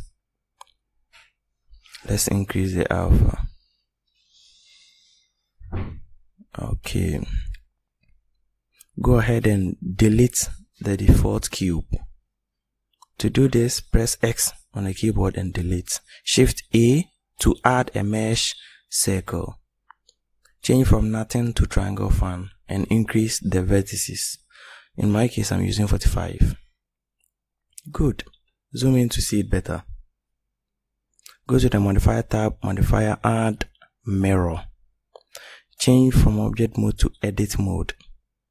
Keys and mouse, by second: 1.0-3.8 middle drag, 10.6 click, 15.1 x, 17.7 shift+a, 22.9 click, 27.2 click, 28.1 middle click, 31.5-34.2 drag.